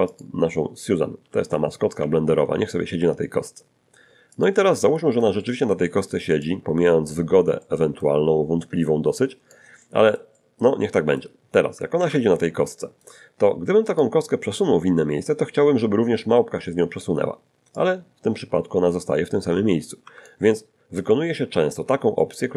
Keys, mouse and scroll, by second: 0.1 click, 1.2 g, 4.3 ctrl+click, 4.7-5.9 ctrl+middle drag, 6.5 ctrl+click, 7.6 middle click, 9.2 click, 9.8-11.4 middle drag, 12.0 ctrl+2, 12.4 ctrl+scroll up 1, 12.8 ctrl+shift+middle click, 13.9 right click, 16.3 middle click, 17.7-20.5 drag, 20.0 Escape, 21.1 shift+middle click, 22.2-22.5 shift+middle drag.